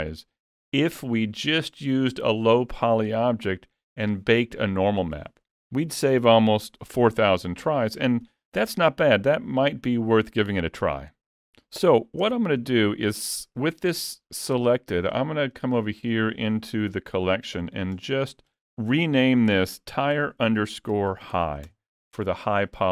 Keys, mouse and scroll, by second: 12.2 Tab, 15.6 click, 15.8 click.